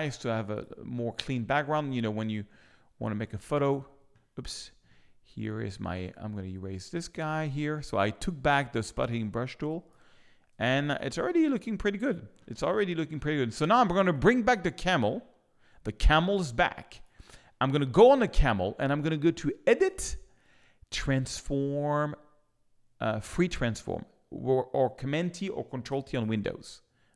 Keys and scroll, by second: 9.2 space, 10.5 z.